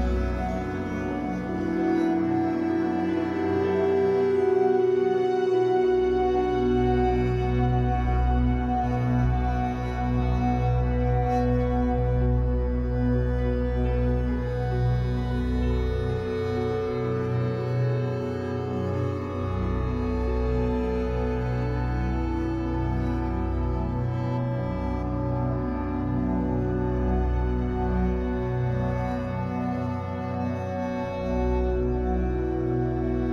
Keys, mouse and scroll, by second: 1.1 scroll up 1, 1.3-13.1 shift+middle drag, 3.3 ctrl+z, 6.4 KP_1, 7.0 scroll down 2, 9.2-9.9 scroll up 2, 9.9 ctrl+r, 13.1 click, 14.1 click, 14.9-16.1 shift+middle drag, 15.3-16.1 scroll up 2, 16.1 click, 16.7 g, 17.5 right click, 18.4 e, 19.7 click, 20.0 e, 21.5 click, 21.7 e, 22.4 click, 22.7 e, 24.0 click, 25.4-26.4 shift+drag, 26.4 f, 26.8 click, 27.3 g, 28.7-30.5 shift+drag, 30.5 f, 30.7 click, 31.1 g, 31.8 click, 33.1 b.